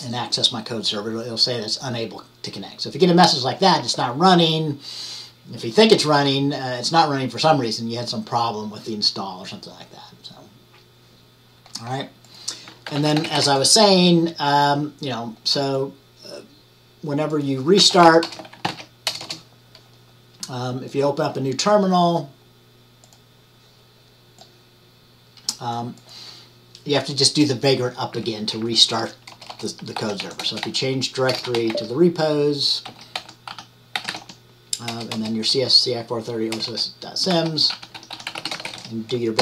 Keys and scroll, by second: 12.8-13.9 typing, 17.9 typing, 19.1 ctrl+l, 29.8-34.8 typing.